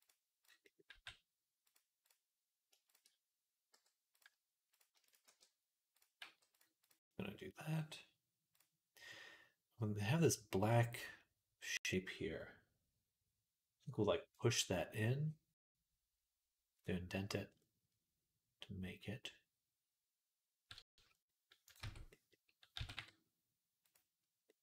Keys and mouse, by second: 0.8 g, 3.6 m, 4.9 shift+right click, 5.1 shift+r, 6.0 g, 6.7 click, 17.0 middle click, 17.6 middle click, 19.2-24.6 middle drag, 20.8 Tab, 21.5 click, 21.6 Tab, 22.6 s.